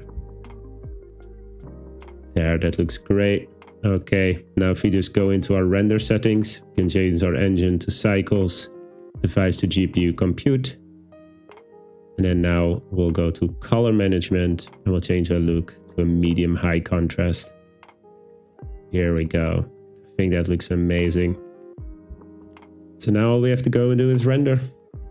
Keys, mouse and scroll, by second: 7.2-8.1 drag, 8.7-9.7 drag, 13.6 click, 15.1-16.4 drag.